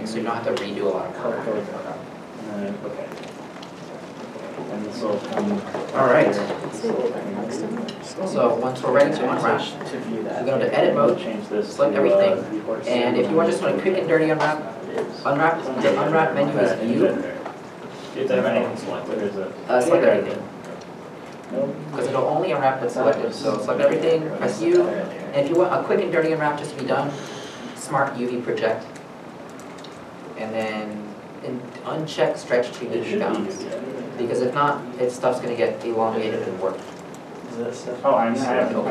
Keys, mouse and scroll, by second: 11.1 Tab, 12.2 a, 16.9 u, 21.1 3, 21.9 a, 24.5 a, 25.0 u.